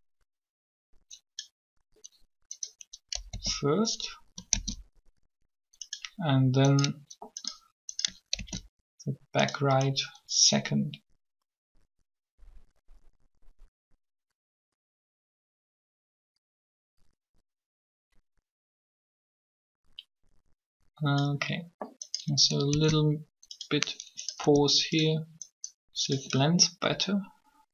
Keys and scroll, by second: 3.3 d, 4.5 shift+d, 8.3 shift+d, 22.7 shift+d, 24.4 g.